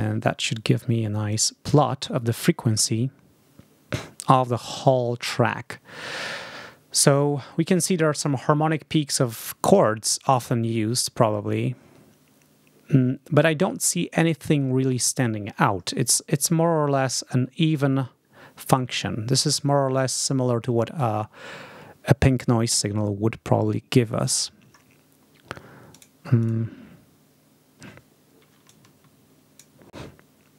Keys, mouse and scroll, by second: 1.2 click, 25.8 click, 26.3 click, 28.6-29.7 drag.